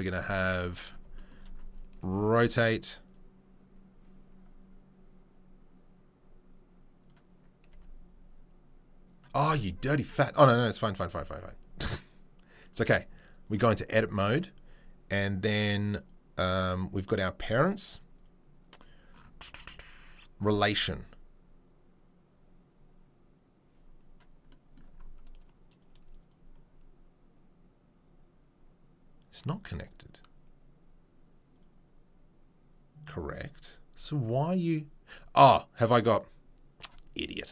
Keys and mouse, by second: 1.9 r, 7.0 click, 7.1-10.2 middle drag, 7.7 r, 10.2 click, 10.3-12.6 middle drag, 12.6-14.3 drag, 14.3-16.5 middle drag, 16.5-18.0 drag, 18.0 middle click, 18.1 right click, 18.2-25.7 middle drag, 25.7 right click, 25.8 middle click, 26.2 right click, 26.3-29.6 middle drag, 29.6 right click, 29.7-33.3 middle drag, 33.3-37.5 right drag.